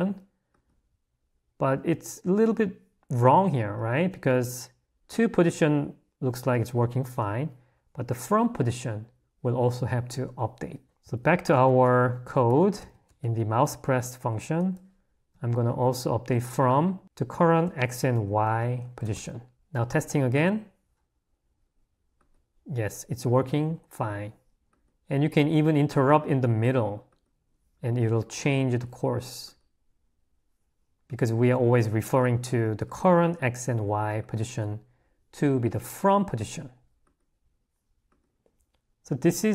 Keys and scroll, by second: 10.9 Escape, 11.6 o, 19.2 Escape.